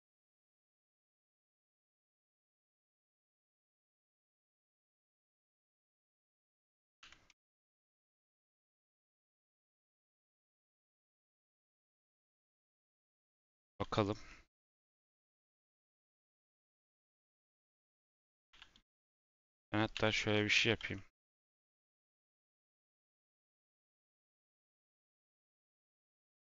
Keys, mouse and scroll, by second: 0.0 Down, 0.0 Down, 0.2 middle click, 0.6 3, 1.5 middle click, 2.3 click, 3.3 middle click, 3.9 click, 4.5 click, 5.2-6.9 drag, 6.9 x, 12.2 click, 12.7 x, 14.0 click, 14.2 middle click, 14.9 click, 15.5 click, 15.9-17.0 middle drag, 17.0 click, 17.3 middle click, 17.9 click, 18.2-18.7 typing, 19.4 Tab, 19.9 /, 20.9 middle click, 21.2 z, 22.9 click, 23.5 scroll down 2, 23.7 middle click, 24.0-25.1 scroll up 1, 25.9-26.4 drag.